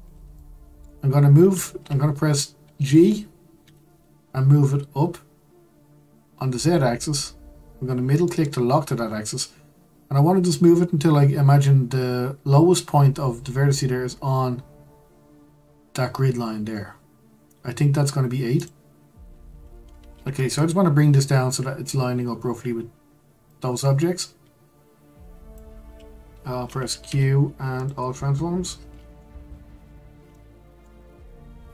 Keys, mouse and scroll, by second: 0.3-3.5 shift+middle drag, 3.6 g, 19.1 Tab, 19.7-22.7 scroll up 1, 23.4 click, 27.0 q, 28.9-29.7 scroll up 4, 29.7 Tab, 30.3 shift+middle click, 31.0-31.7 scroll up 2.